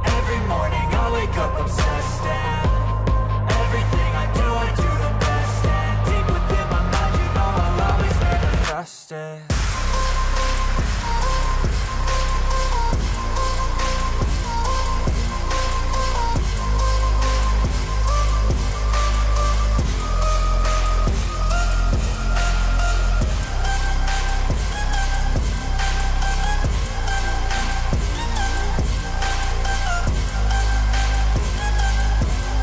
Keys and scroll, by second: 2.0 ctrl+z, 4.3 ctrl+z, 11.0 ctrl+z, 11.5 ctrl+z, 13.0 ctrl+z, 14.4 ctrl+z, 15.0 ctrl+z, 18.9 e, 19.2 b, 20.2 e, 21.0 ctrl+z, 21.8 e, 24.2 ctrl+z, 27.0 ctrl+z, 27.6 e.